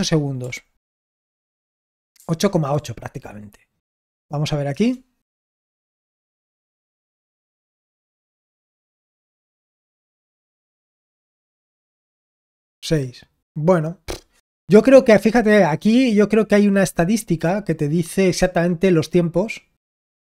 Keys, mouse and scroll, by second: 1.6 ctrl+p, 2.1 ctrl+p, 2.7 ctrl+p, 4.7 Return.